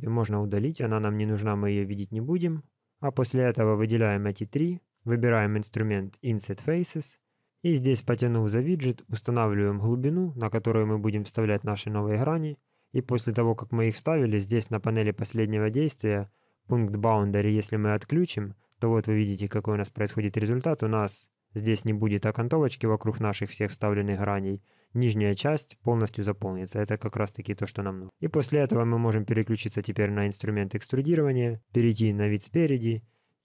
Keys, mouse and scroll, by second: 1.4 middle click, 2.6 shift+click, 3.0 shift+click, 3.3 shift+click, 3.8 middle click, 6.1 click, 8.0 click, 14.5 click, 16.4 click, 17.9 click, 19.1 scroll up 3, 19.5 shift+middle click, 20.0 scroll down 1, 24.3 click, 26.5 scroll down 2, 27.0 middle click, 29.5 click, 31.8 KP_1.